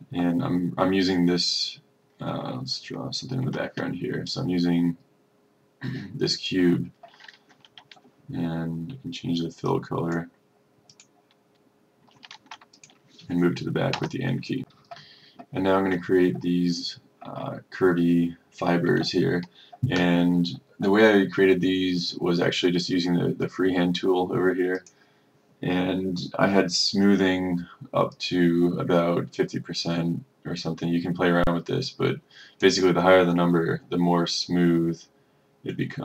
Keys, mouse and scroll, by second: 3.5 F4, 4.4-11.0 drag, 12.7 F1, 12.9 click, 14.1 End, 14.8 click, 28.8-36.0 drag.